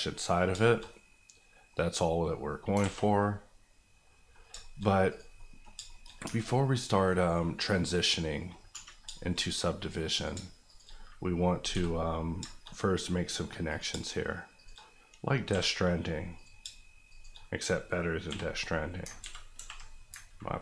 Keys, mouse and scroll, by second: 0.2 middle click, 0.3 scroll down 2, 0.6 shift+middle click, 0.8-2.6 middle drag, 2.6 scroll up 2, 2.8 alt+a, 3.0 middle click, 4.3 scroll down 2, 4.6 shift+middle click, 4.8 middle click, 5.1 click, 5.3 middle click, 5.8 shift+middle click, 6.0 middle click, 6.2 Tab, 6.5 middle click, 7.6 middle click, 8.7 1, 9.1 shift+middle click, 9.4 scroll up 1, 10.1 click, 10.3 shift+click, 10.9 click, 11.7 j, 12.4 shift+j, 12.5 shift+middle click, 13.0-13.7 scroll up 1, 13.7 click, 13.9 shift+click, 14.8 click, 15.5 j, 16.3 click, 16.6 shift+click, 17.4 click, 18.2 j, 19.1 ctrl+j, 19.2 ctrl+z, 19.5 ctrl+r, 20.1 ctrl+r.